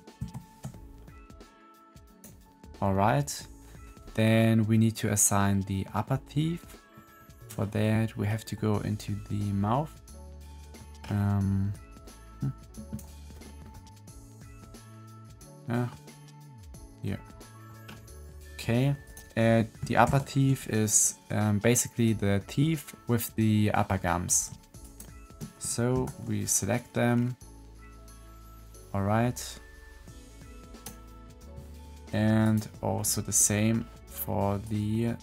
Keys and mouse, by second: 0.1 ctrl+l, 2.0 click, 4.3-5.8 drag, 6.7 click, 6.9 middle click, 8.5 middle click, 8.7 middle click, 9.0 middle click, 9.3-10.7 middle drag, 11.7-12.9 middle drag, 13.6 middle click, 14.2 middle click, 15.3 middle click, 17.1 middle click, 18.9 click, 20.0 ctrl+l, 25.8 ctrl+l, 30.6-32.4 middle drag, 32.4 click, 32.9 middle click, 33.3 middle click, 34.5 middle click.